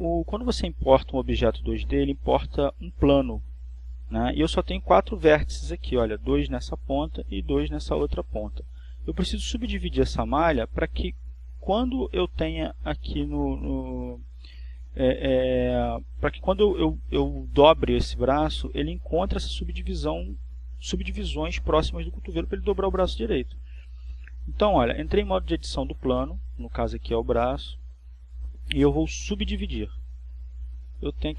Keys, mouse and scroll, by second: 0.1-1.7 shift+middle drag, 1.7-2.4 shift+scroll up 4, 2.4-3.9 shift+middle drag.